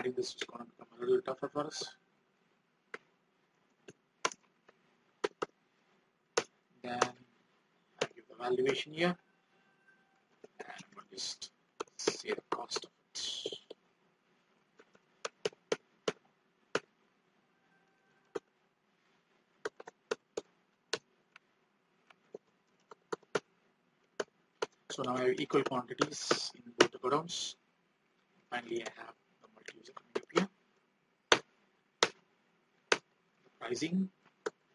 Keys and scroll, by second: 9.0 alt+Tab, 28.5 ctrl+r, 33.4 alt+Tab.